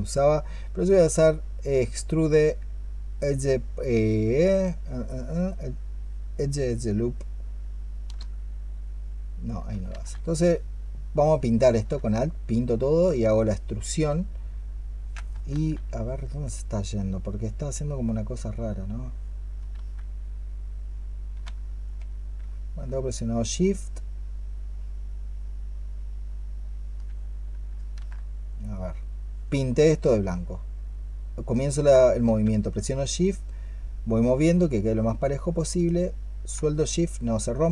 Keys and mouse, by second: 9.7 ctrl+z, 10.9 alt+click, 15.4 ctrl+z, 16.1 double click, 19.6 ctrl+z, 22.7-24.1 shift+drag, 27.8 ctrl+z, 34.4 shift+click.